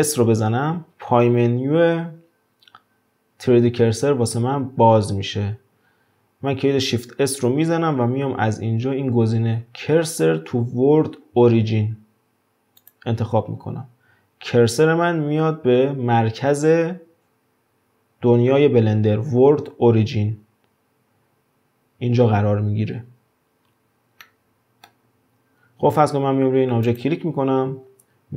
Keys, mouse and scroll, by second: 0.3 shift+s, 21.7-23.6 scroll up 1, 23.6 scroll down 5, 24.2-26.3 middle drag, 26.3-26.9 scroll up 1, 26.9 click.